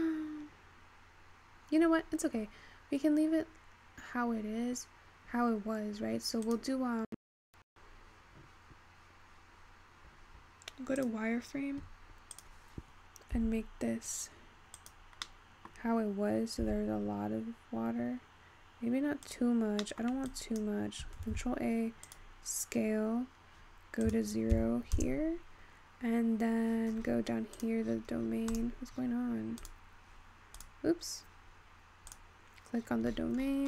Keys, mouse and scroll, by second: 0.7 click, 11.7 click, 14.5 s, 16.3-18.3 scroll up 1, 18.3 s, 21.8 ctrl+a, 23.3-24.8 scroll up 6, 24.8-29.1 drag, 29.1-30.7 scroll down 10, 30.7 click, 33.4-33.6 scroll down 10.